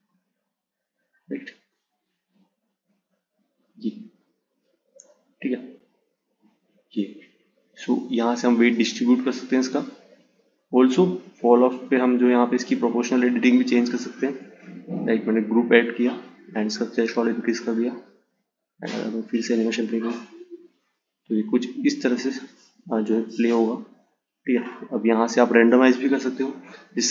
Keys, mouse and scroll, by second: 1.7-4.7 drag, 6.1-9.1 drag, 9.4-11.9 drag, 12.9 click, 14.1-17.1 drag, 18.2-21.2 drag, 22.3-25.4 drag.